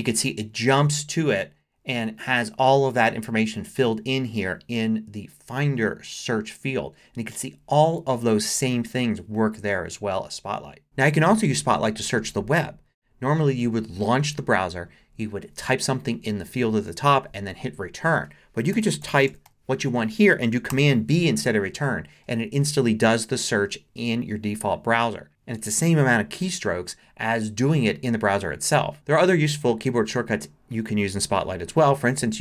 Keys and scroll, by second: 10.8 BackSpace, 18.5-20.0 typing, 20.4 super+t, 20.7 super+b.